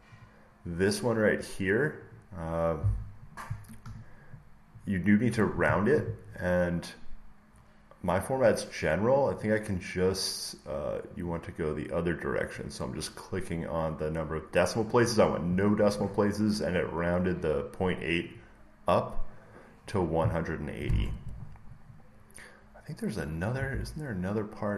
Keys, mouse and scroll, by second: 0.2 click, 1.9 click, 2.1 click, 3.7 Return, 4.7 click, 9.3 click, 11.2 click, 12.4 click, 16.8 click, 18.3 click, 21.6 scroll down 1, 22.7 scroll, 23.0 scroll down 2, 23.1 scroll up 1, 23.4 scroll, 23.6 alt+Tab.